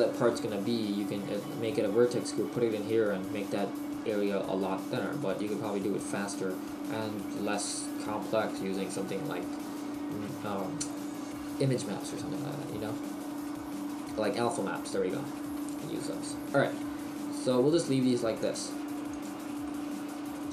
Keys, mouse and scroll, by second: 7.5 middle click, 18.5 click, 19.7 middle click.